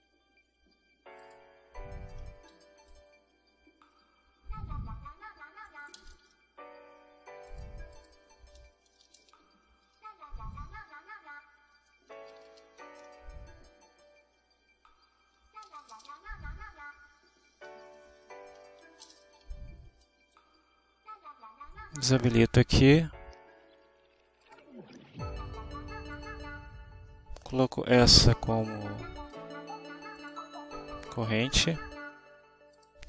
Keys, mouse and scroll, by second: 0.0-4.2 typing, 1.7 Return, 2.9 shift+Return, 4.5 shift+Return, 4.8 shift+Return, 5.7-6.6 typing, 7.2 click, 7.6 Up, 7.9 Home, 8.0 shift+Down, 8.7-10.7 typing, 11.7-14.2 typing, 16.0-17.2 typing, 16.9 Return, 17.4 Right, 17.5 Down, 17.9 click, 20.1 click, 20.4 click, 22.9 click, 24.5 click, 26.2 click, 28.0-29.6 drag, 30.2 click, 32.8 click.